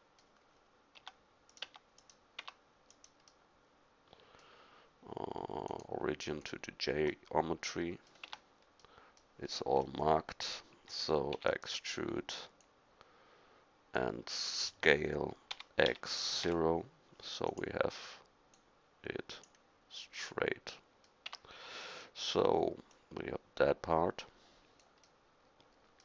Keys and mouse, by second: 1.0 Tab, 1.5-2.9 middle drag, 2.4 Tab, 7.1 middle drag, 8.3 Tab, 9.9 KP_1, 11.4 e, 15.5 s, 18.5-20.4 drag, 21.3 Tab, 22.9-24.5 middle drag, 24.8 middle click, 25.4 middle click.